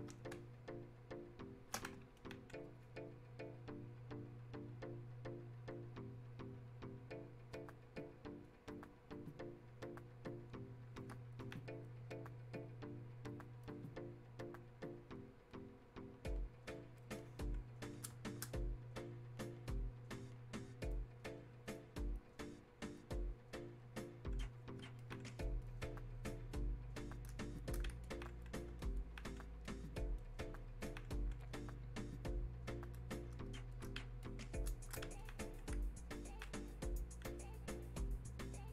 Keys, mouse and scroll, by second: 0.4 space, 0.9 click, 1.0 space, 1.8 space, 2.2-11.4 drag, 11.4-28.1 alt+drag, 28.1-35.2 alt+drag, 35.2 alt+click.